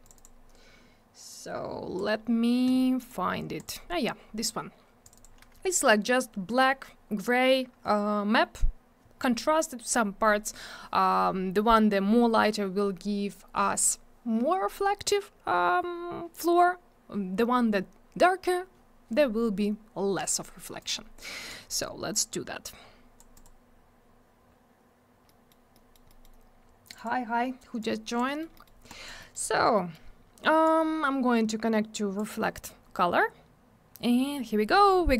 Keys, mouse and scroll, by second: 0.0 click, 0.1 click, 0.1 click, 0.2 double click, 1.3 click, 3.0 click, 3.1 click, 3.6 click, 3.6 click, 5.0 click, 5.1 click, 5.1 click, 5.2 double click, 20.8 click, 20.8 click, 21.5 click, 23.3 click, 23.4 click, 25.2 middle click, 25.7 middle click, 25.9 middle click, 26.1 middle click, 26.2 double middle click, 26.8 click, 26.9 click, 26.9 click, 27.0 double click, 27.8 click, 28.3 middle click, 28.4 middle click, 28.5 middle click, 28.6 double middle click, 28.9 click, 29.0 click, 29.2 middle click, 29.3 double middle click, 29.7 middle click, 29.9 middle click, 30.6 click.